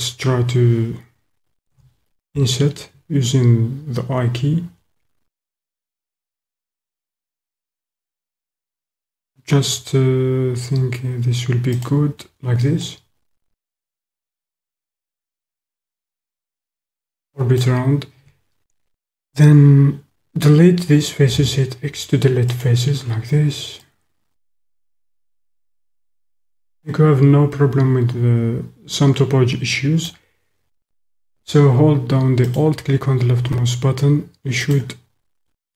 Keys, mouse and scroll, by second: 1.8 i, 11.8-12.9 drag, 13.1 middle click, 13.3-14.9 drag, 15.5 click, 16.0 middle click, 16.2 click, 16.6 click, 16.7-17.7 middle drag, 21.8 x, 23.7 click, 24.2-25.4 drag, 25.7 click, 25.9-28.5 middle drag, 28.6-30.1 middle drag, 30.1 click, 32.4 alt+click, 34.6 click.